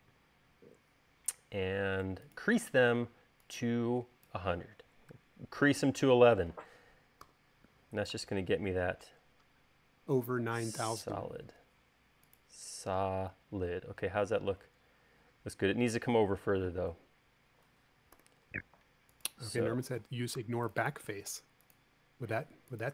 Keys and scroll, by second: 6.4 space, 7.6 u, 18.6 u, 20.8 u.